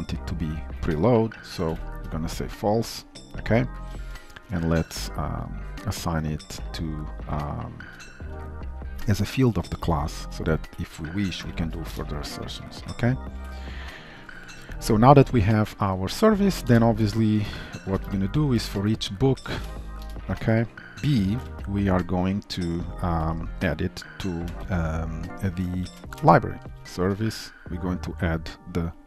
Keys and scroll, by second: 3.9 ctrl+shift+Return, 4.4 alt+Return, 7.9 Return, 11.3 ctrl+alt+f, 12.7 ctrl+s, 16.8 shift+Return, 17.9 Return, 24.6 Delete, 27.9 Return.